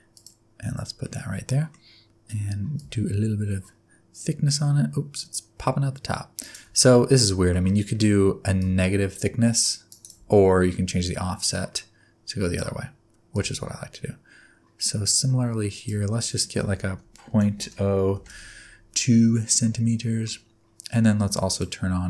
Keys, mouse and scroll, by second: 1.0 middle click, 2.7 click, 6.8 middle click, 7.5 middle click, 8.5 click, 10.8 click, 13.3 click, 16.2 click, 19.3 middle click, 20.3-21.4 scroll up 1, 21.4 click.